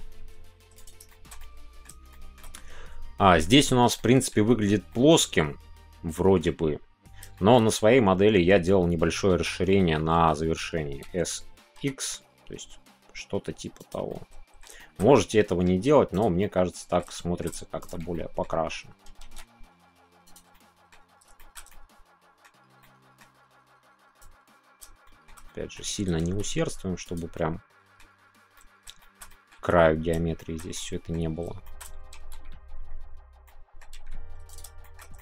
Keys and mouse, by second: 1.0 shift+middle click, 1.4 middle click, 2.1 shift+middle click, 3.9 middle click, 4.4 Tab, 4.9-6.3 middle drag, 7.3-9.1 shift+middle drag, 9.3 Tab, 9.6 middle click, 13.8 click, 14.1 middle click, 14.7 shift+middle click, 15.1 middle click, 16.4 middle click, 17.1 shift+middle click, 18.1 middle click, 20.5 middle click, 21.4 shift+middle click, 21.7 middle click, 22.8 middle click, 24.2 click, 25.2 shift+middle click, 25.4 middle click, 27.0 click, 27.3 middle click, 28.5 middle click, 28.9 shift+middle click, 29.3 middle click, 29.5 Tab, 30.4 shift+middle click, 30.7 middle click, 31.6 shift+middle click, 32.1 ctrl+s, 33.4-34.1 middle drag, 34.8 shift+middle click, 35.1-35.2 middle drag.